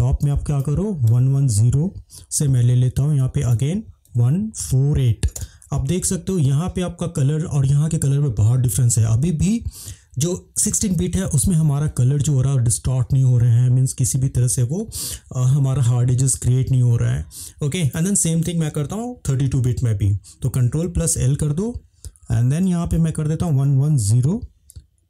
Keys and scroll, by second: 1.2-1.7 typing, 3.8-4.8 typing, 5.4 Return, 20.7 ctrl+l, 23.5-24.2 typing.